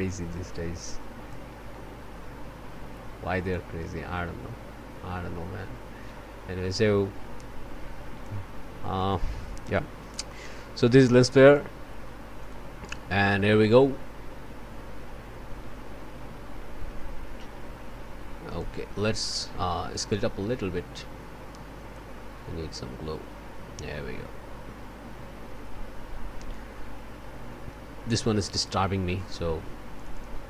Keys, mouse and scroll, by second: 1.9 scroll down 1, 3.5-8.5 drag, 8.6 scroll down 1, 8.9 click, 9.7 o, 10.0 scroll down 1, 10.3 click, 11.4 click, 12.4 click, 12.7-13.8 scroll up 1, 13.8-18.4 scroll up 1, 18.4 click, 19.9 click, 21.8 click, 22.5-23.5 scroll up 3, 24.7 scroll down 1, 25.4 scroll up 1, 26.7-27.3 scroll up 1, 28.8 scroll down 1, 29.1 click, 30.0 click.